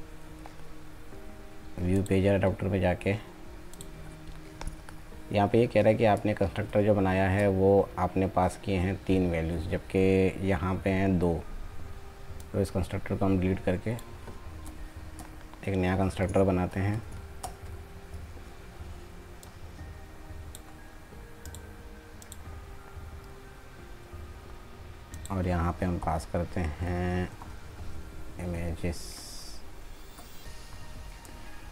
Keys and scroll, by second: 5.5 ctrl+z, 16.7 alt+Insert.